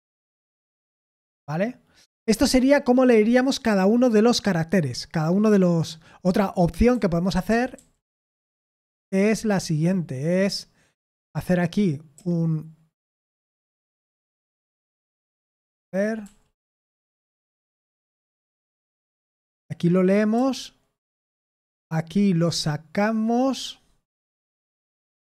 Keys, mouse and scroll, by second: 0.5 Return, 6.9-9.9 typing, 12.2 i, 15.5 Escape, 18.9-20.4 typing.